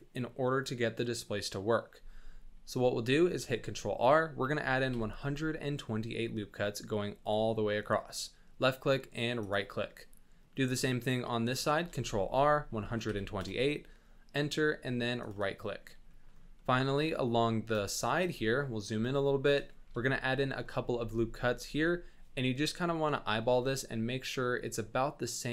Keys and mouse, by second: 3.3 ctrl+r, 9.9 click, 11.8 ctrl+r, 15.6 click, 16.1 shift+middle click, 16.6 middle click, 17.1 shift+middle click, 17.9 shift+middle click, 18.4-18.8 ctrl+middle drag, 19.2-19.5 shift+middle drag, 19.8 ctrl+r.